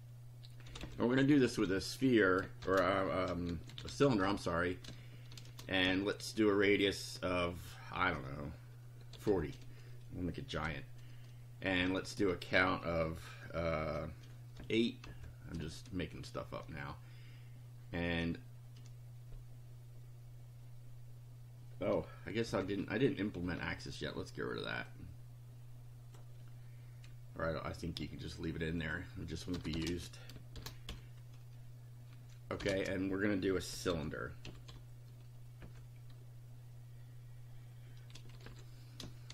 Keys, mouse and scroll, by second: 0.0-5.9 typing, 8.9-9.7 typing, 11.8 ,, 12.2 space, 14.5 8, 15.1 ,, 15.5 space, 22.4 Down, 24.9-26.3 drag, 28.8 click, 29.5 BackSpace, 29.9 space, 30.5 shift+0, 30.8 shift+;, 32.5-35.5 typing, 37.9-39.3 typing.